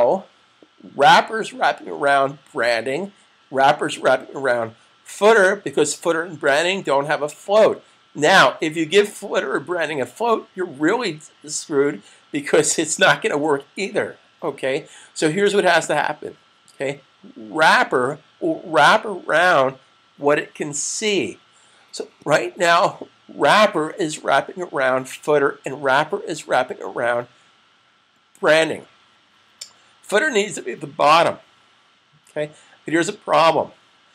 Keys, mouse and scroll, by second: 15.6 click.